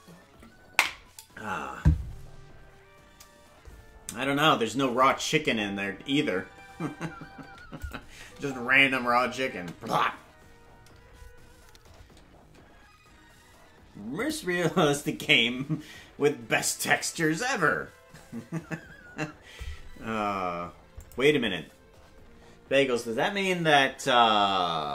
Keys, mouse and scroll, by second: 5.0 click, 5.3 space, 7.8 click, 8.2 space, 10.0 space, 21.0 click.